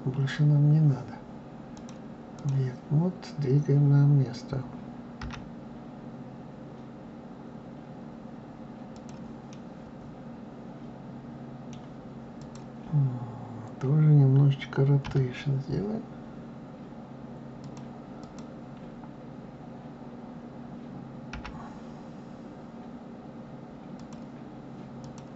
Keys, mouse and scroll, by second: 1.7-4.7 drag, 5.1 g, 9.4-12.3 middle drag, 12.3 click, 15.0 r, 18.1 click, 21.3 g, 24.9 click.